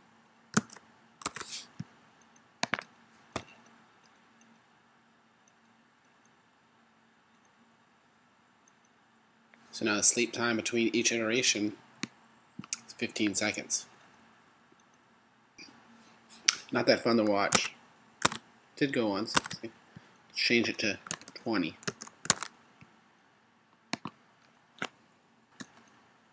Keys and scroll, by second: 0.8 super+s, 1.5 super+Tab, 17.8 super+Tab, 22.4 super+s, 22.5 super+Tab, 25.8 Return.